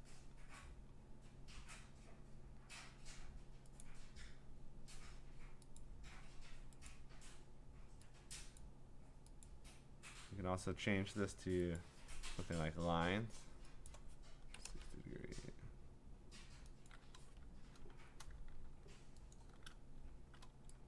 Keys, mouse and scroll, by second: 3.8 click, 5.8 click, 8.6 click, 9.4 click, 11.8 click, 13.9 click, 14.3-15.2 typing, 16.9 click, 17.9 5, 19.3 click.